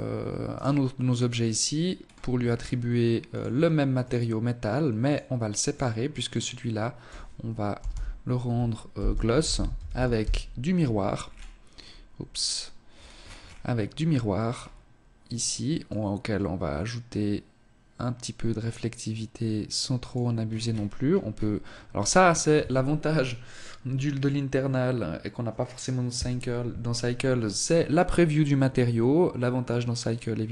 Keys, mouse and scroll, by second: 1.0-1.9 scroll up 7, 2.2 click, 4.0 click, 4.6 click, 10.2 scroll down 5, 10.7-11.3 scroll up 6, 11.9-12.8 scroll down 6, 13.4-13.8 scroll down 3, 14.2 click, 14.8 click, 19.4-24.1 scroll up 12, 24.1 scroll up 1.